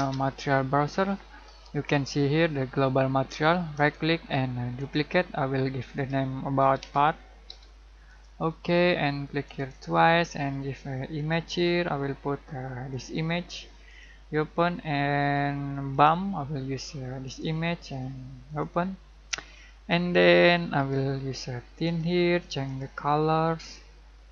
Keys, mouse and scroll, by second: 3.7 right click, 4.7 click, 6.4-7.4 typing, 8.0-24.3 drag.